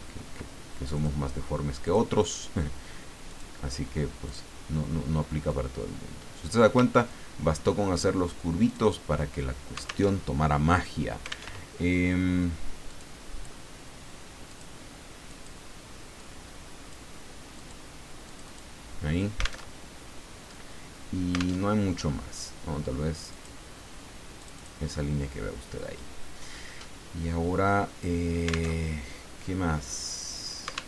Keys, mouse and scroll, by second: 0.9 click, 1.8 click, 3.3 click, 4.2 click, 5.5-6.9 drag, 6.9-7.6 ctrl+scroll down 2, 7.6 ctrl+click, 8.6 click, 10.1 alt+Tab, 11.5 alt+Tab, 12.9 click, 14.5 click, 15.3 click, 16.2 click, 17.5 click, 18.3 click, 19.7 alt+Tab, 21.6 alt+Tab, 23.3 click, 24.4 click, 26.7-27.8 drag, 28.7 alt+Tab.